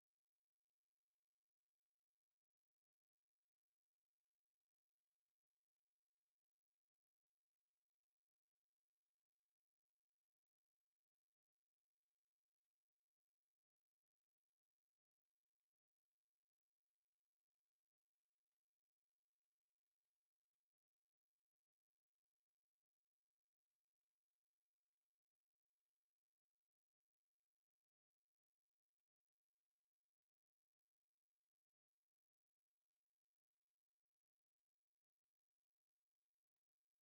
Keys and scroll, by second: 2.7 Escape, 3.3 r, 3.6 Escape, 3.8 c, 4.1 space, 5.7 Escape, 6.0 r, 6.3 space, 7.0 Escape, 7.9 m, 8.0 space, 8.2 F8, 9.7-11.8 typing, 10.4 Escape, 12.4 F8, 14.1 Escape, 15.9 F8, 16.4 Escape, 16.7 e, 16.8 space, 20.8 Escape, 20.8 c, 21.1 space, 27.1 Escape, 27.6 o, 27.6 space, 33.9 space, 34.2 m, 34.3 space, 35.3 c, 35.5 space, 35.6 p.